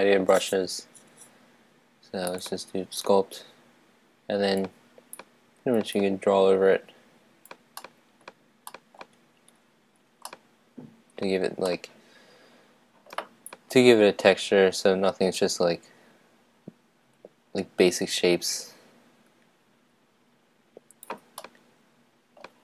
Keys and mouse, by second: 3.0-7.8 drag, 7.8-13.4 middle drag, 13.4-21.0 drag, 21.4-22.6 middle drag.